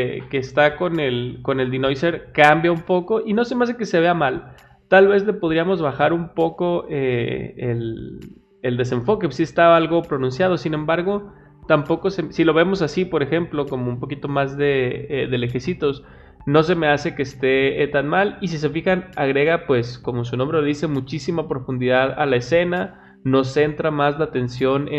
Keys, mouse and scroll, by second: 11.2 middle click, 18.0 middle click.